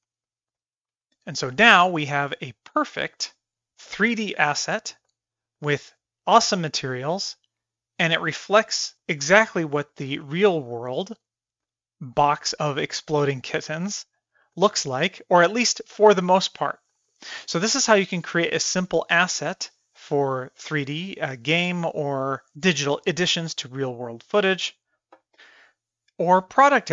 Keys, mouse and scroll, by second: 0.1 shift+middle click, 2.9 click, 3.7 KP_1, 3.8-4.1 middle drag, 4.4 middle drag, 4.8 middle click, 5.1 middle drag, 5.6-7.7 middle drag, 8.2-9.0 middle drag, 9.9-10.2 middle drag, 10.3 middle drag, 10.7 middle click, 11.7-12.5 middle drag, 12.7 middle drag, 13.1 middle click, 13.5-14.3 middle drag, 14.5 middle click, 14.9 middle click, 15.2 middle drag, 16.0 middle drag, 16.4-16.7 middle drag, 16.9 middle drag, 17.4 middle click, 17.7 middle drag, 18.1 middle drag, 18.7 middle click, 19.0 middle click, 19.4-20.6 middle drag, 20.8-21.6 middle drag, 21.8-22.5 middle drag, 22.7-23.9 middle drag, 24.2 shift+middle click, 24.5-24.9 middle drag, 25.1 shift+middle click, 25.6-26.1 middle drag, 26.4-26.7 middle drag.